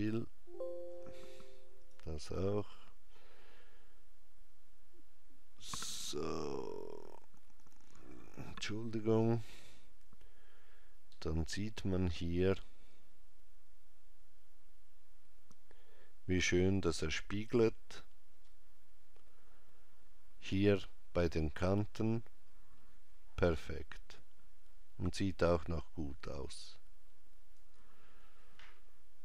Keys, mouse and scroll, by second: 4.3 scroll down 1, 5.0 scroll down 2, 11.2 ctrl+middle click, 26.2 click.